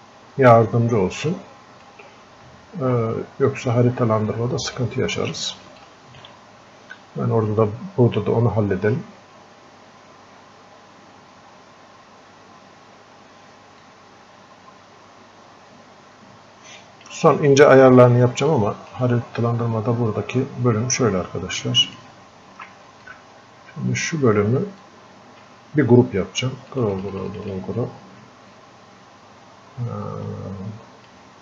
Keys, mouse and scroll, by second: 1.4-4.0 drag, 4.0 scroll up 1, 4.8 click, 5.8 alt+click, 7.0 scroll up 1, 9.1 scroll down 1, 13.8-21.3 drag, 18.8 typing, 21.6 ctrl+shift+Num_Lock, 21.6 click, 21.6 typing, 23.0-24.8 drag, 24.8-31.4 drag.